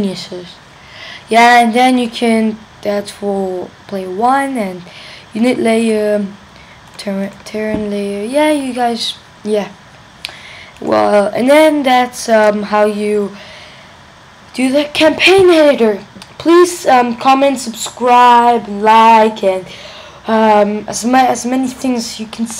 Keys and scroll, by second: 12.4 super+q.